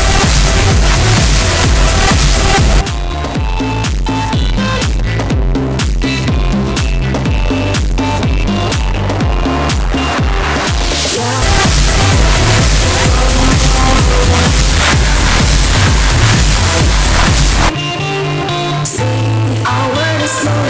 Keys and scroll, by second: 2.8 Page_Down, 17.9 Page_Down.